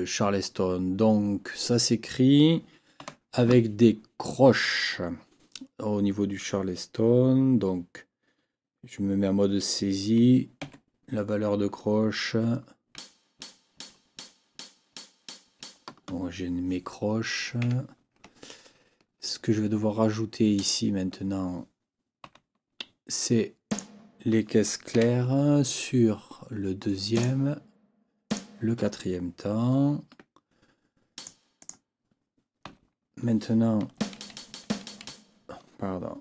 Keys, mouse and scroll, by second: 3.0 n, 10.6 KP_4, 12.9 g, 17.6 Escape, 18.4-19.0 ctrl+scroll up 4, 20.5 click, 22.2 n, 23.7 click, 24.9 4, 27.1 click, 28.3 click, 30.1 Escape, 31.1 click, 31.6 click, 32.6 n, 34.0 Left.